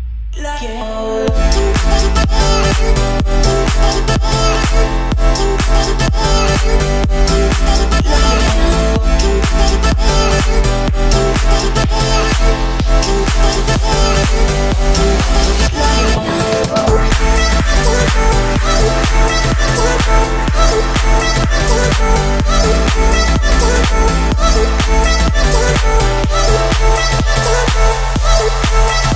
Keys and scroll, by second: 9.5 Escape, 14.4 1, 15.0 Return, 16.9 Return, 17.3 Escape, 18.5 o, 20.0 Escape, 22.1 o, 25.2 Escape.